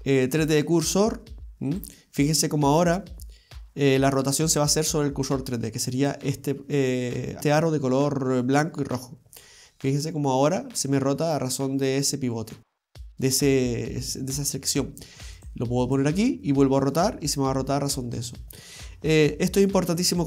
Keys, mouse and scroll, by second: 2.9 r, 7.4-9.2 scroll down 1, 9.2 scroll up 2, 9.5 scroll down 2, 10.0 r, 15.8 click, 16.3 r, 19.3-20.0 scroll up 1, 20.0 scroll down 1, 20.1-20.2 scroll down 1.